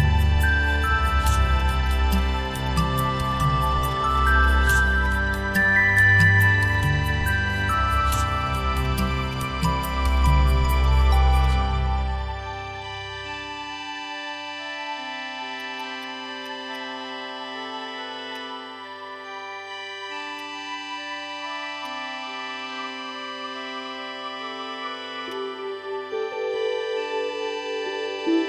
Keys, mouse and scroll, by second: 0.1 shift+click, 1.6 shift+click, 5.0 shift+click, 9.3 shift+click, 11.4 shift+click, 19.2 ctrl+z, 25.3 alt+click, 28.0 ctrl+z.